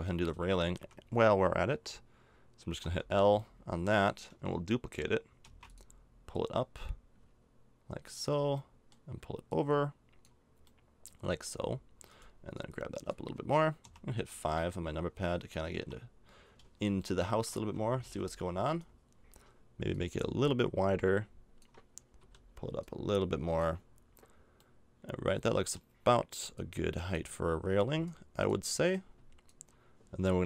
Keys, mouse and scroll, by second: 0.3 Tab, 0.8 a, 2.8 l, 5.4 shift+d, 9.5-10.7 drag, 10.7 middle click, 11.1 click, 11.2 middle click, 11.4 middle click, 13.8 KP_5, 15.7 KP_5, 17.2-18.6 middle drag, 17.6 z, 18.0 z, 22.2 l, 23.8 click, 25.1 middle click, 25.7 middle click, 26.5-30.4 drag.